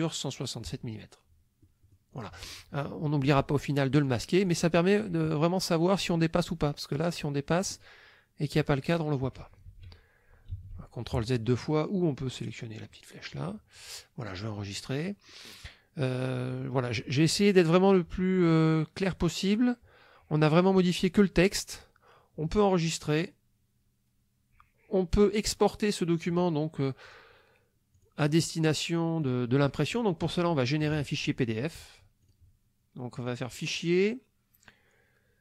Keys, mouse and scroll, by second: 1.7 click, 4.1 click, 4.5 click, 6.1-7.7 drag, 8.5 click, 9.7 ctrl+z, 10.5 ctrl+z, 13.3 click, 14.7 click, 15.3-16.7 drag, 27.0 click, 27.9 click, 29.2 click, 29.9 click, 32.3 click, 33.2 click.